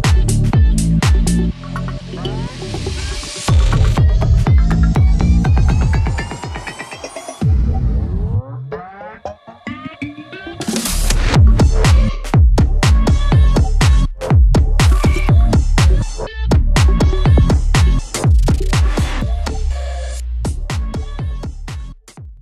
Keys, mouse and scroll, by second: 0.8 click, 6.9 click, 8.6 click, 14.8 ctrl+c, 15.6 scroll down 1, 16.5-18.7 drag, 18.7 shift+F2, 19.3 click, 21.0 shift+F2.